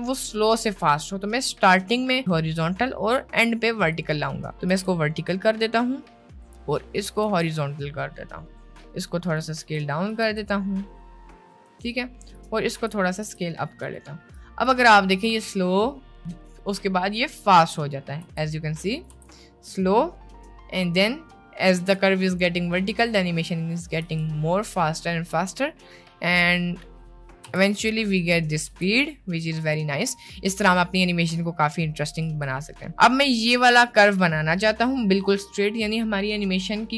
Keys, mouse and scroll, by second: 4.0 click, 4.9 r, 7.0 click, 7.4 r, 9.7 s, 10.3 r, 11.8 s, 12.4 click, 12.9 r, 13.4 s, 14.4 click, 15.3 space, 18.3 space, 18.9 click, 19.3 space, 21.9 space, 23.3-23.9 drag, 24.1 space, 27.7 space, 28.3-28.7 drag, 28.9 space, 32.5 space.